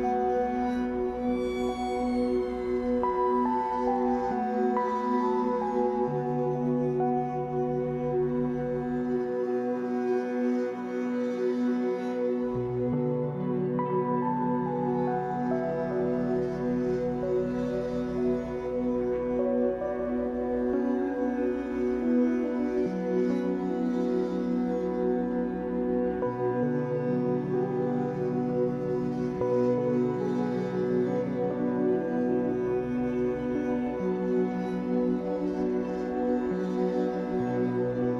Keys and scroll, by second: 6.2 s, 9.5 s, 11.4 ctrl+z, 12.4 s, 15.4 ctrl+z, 18.6 Escape, 20.1 w, 20.4 s, 24.4 Escape, 26.1 s, 29.5 Escape, 31.2 Escape, 33.5 s.